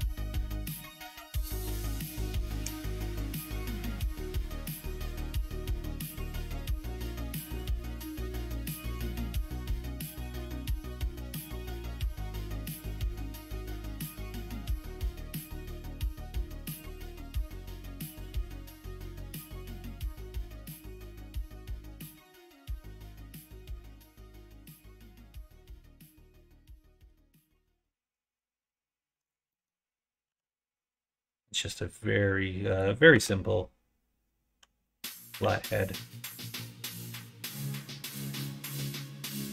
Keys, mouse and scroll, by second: 2.5 g, 4.8 g, 6.9 r, 8.8 f, 9.4 middle click, 10.0 middle click, 10.8 e, 11.9 ctrl+z, 12.3 s, 13.6 KP_1, 14.1 KP_2, 14.5 KP_9, 15.7 KP_3, 16.2 KP_9, 17.6 s, 22.6 click, 23.4 g, 26.5 middle click, 27.0 click, 27.4 e, 29.5 click, 30.2 k, 33.0 1, 35.3 k.